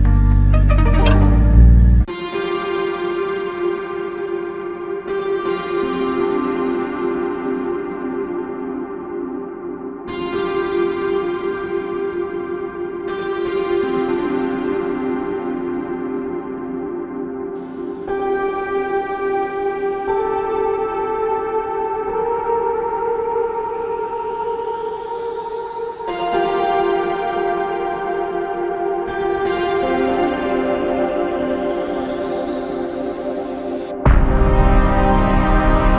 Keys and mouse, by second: 1.2 double click, 4.7 space, 7.1 double click, 22.0 ctrl+shift+click, 25.8 ctrl+click, 28.6 alt+click, 31.0 alt+click, 32.6 alt+click, 34.6 double click.